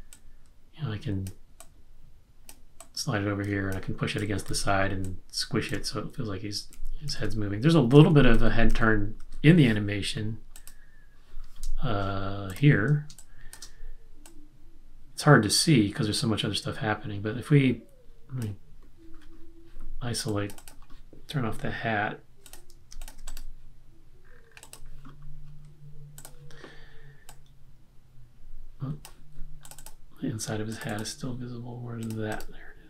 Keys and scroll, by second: 4.3 q, 4.5 q, 6.7 super+z, 7.2 super+z, 8.1 super+z, 8.4 super+z, 8.8 super+z, 13.1 space.